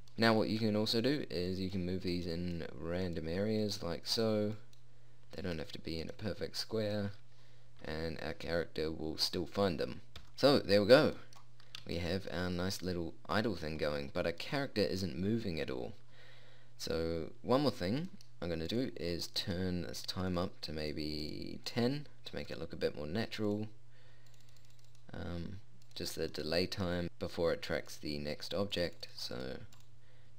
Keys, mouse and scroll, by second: 2.1 middle click, 8.3 p, 11.7-14.9 middle drag, 14.9-18.3 right drag, 19.3-30.3 drag.